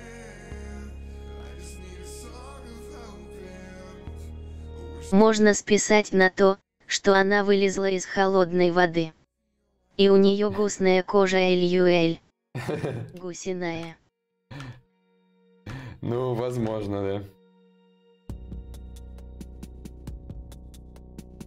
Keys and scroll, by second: 3.4 d, 5.2 d, 18.4 shift+d, 20.2 shift+d.